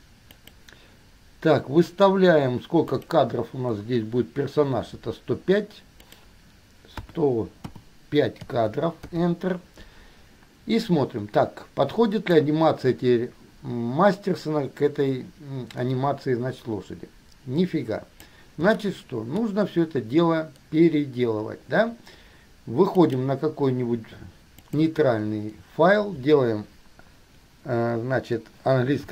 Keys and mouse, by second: 3.2 click, 6.3-9.3 drag, 12.5-18.5 drag, 19.0-20.4 shift+drag, 23.2 click, 24.8 click.